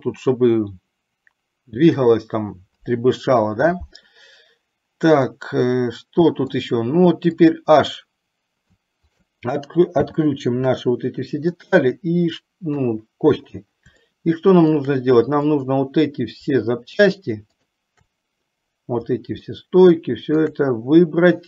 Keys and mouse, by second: 5.5-6.7 middle drag, 9.2 shift+click, 10.2 h, 10.8-12.0 middle drag, 12.9 KP_3, 14.4-15.2 shift+middle drag, 15.6 click, 17.8 shift+click, 19.8-20.7 shift+middle drag.